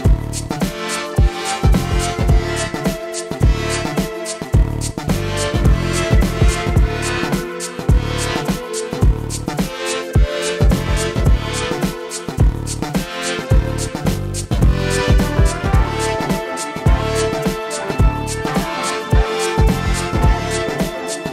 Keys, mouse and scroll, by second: 3.3 shift+a, 5.2 ctrl+alt+KP_0, 7.3 middle drag, 7.7 middle drag, 7.9 shift+middle click, 9.1-10.3 drag, 10.7 click, 11.8-12.8 drag, 14.7-16.1 drag, 16.2 space, 18.2 space, 18.5 click, 19.3 shift+middle click, 19.4 middle click, 19.6 click, 20.3 KP_1, 20.9 middle drag.